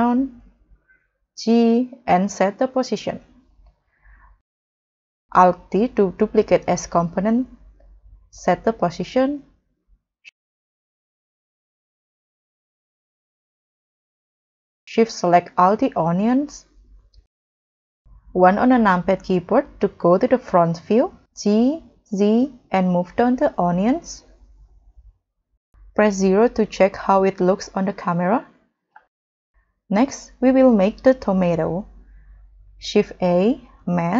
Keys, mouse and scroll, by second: 1.8 g, 4.3 g, 8.2 alt+d, 10.4 middle click, 11.4 KP_0, 17.8 KP_1, 21.8 z, 25.8 KP_0, 29.0 middle click, 29.6-30.2 scroll down 5, 30.5-30.9 scroll up 4, 32.8 shift+a.